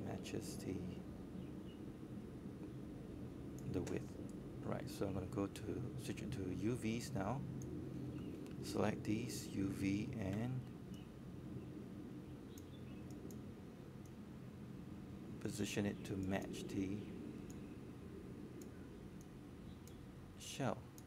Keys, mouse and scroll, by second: 3.8-4.2 scroll down 1, 5.0 click, 6.2-7.4 scroll up 1, 7.4 click, 8.2 scroll up 1, 9.6 alt+middle click, 10.4 click, 14.1 click, 14.3 scroll up 1, 14.6 alt+middle click, 16.5 click, 18.0-18.7 scroll down 1, 18.7-21.0 drag.